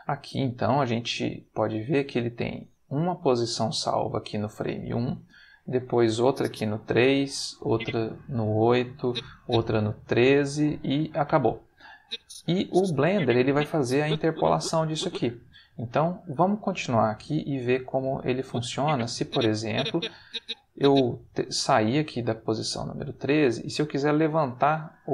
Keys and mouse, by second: 2.5 click, 6.2 click, 7.5 click, 9.0 click, 12.0-15.2 drag, 18.3-21.0 drag.